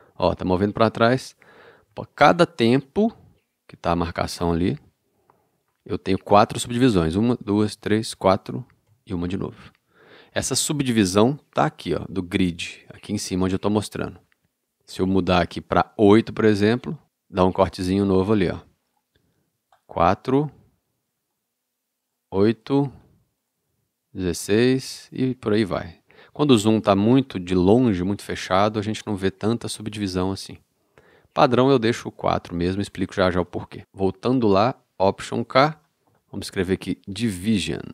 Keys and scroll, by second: 7.4 ctrl+alt+super+., 35.5 alt+k, 37.7 d.